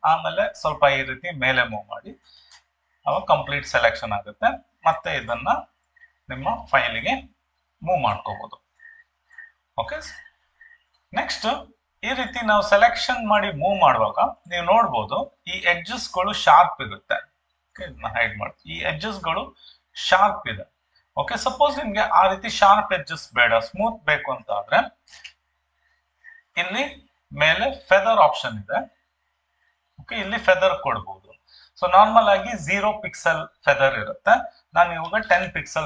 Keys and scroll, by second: 25.0 ctrl+d, 35.2 1, 35.3 0.